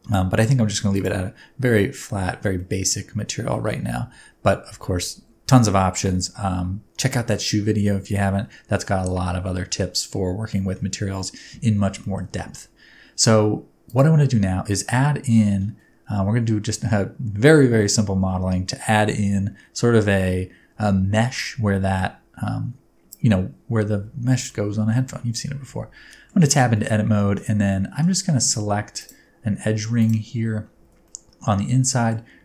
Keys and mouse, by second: 0.9 click, 1.8 middle click, 2.6 middle click, 3.6 middle click, 8.9 middle click, 10.4 shift+middle click, 12.0 shift+middle click, 13.8 click, 24.4-24.9 middle drag, 25.7 Tab, 26.1 middle click, 26.5 alt+z, 26.7 middle click, 27.6 middle click, 28.4 1, 29.9 alt+middle click, 30.8 alt+z, 31.0 middle click, 31.6 alt+z, 31.8 middle click.